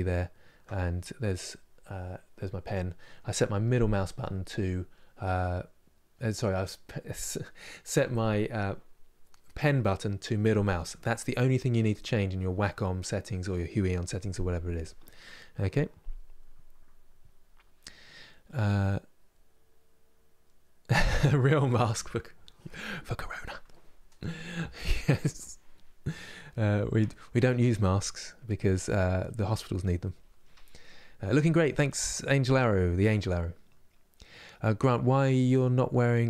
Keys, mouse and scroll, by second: 27.9-36.2 middle drag.